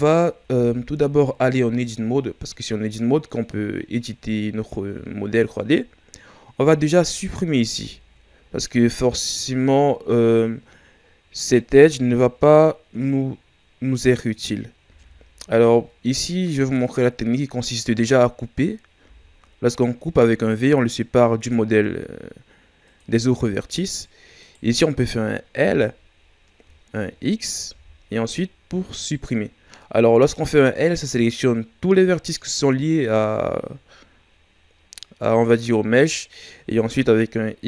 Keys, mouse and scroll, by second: 0.4 Tab, 1.4 scroll down 2, 2.0-3.2 shift+scroll up 1, 3.6-3.9 scroll up 1, 7.1 alt+right click, 9.7 shift+scroll down 2, 10.3-11.2 scroll up 1, 11.7 z, 14.8 z, 24.4 right click, 25.6 l, 27.7 x.